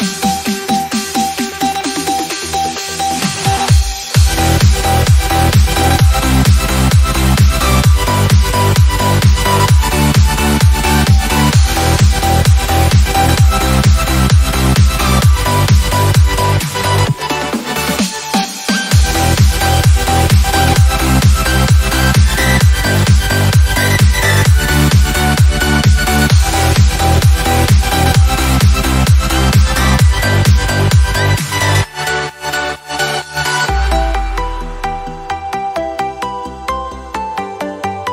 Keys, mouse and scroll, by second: 1.9-4.4 typing, 5.9-11.4 typing, 12.8 click, 13.1-13.8 typing, 15.5-16.2 typing, 15.7 click, 17.5 Return, 19.3-21.0 drag, 21.2-22.0 typing, 23.2 click, 26.9 click, 32.9 scroll up 1, 33.2 scroll down 1, 34.5 click.